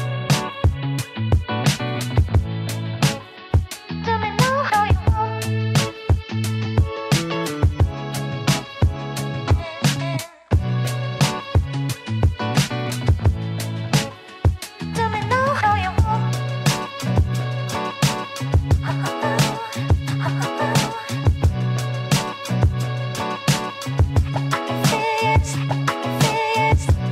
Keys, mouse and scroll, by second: 2.1 click, 4.9 Delete, 8.3 ctrl+d, 13.9 ctrl+d, 14.4 ctrl+alt+z, 16.5 alt+scroll up 1, 18.4-20.2 scroll up 2, 20.3-21.7 drag, 21.7-27.1 alt+drag.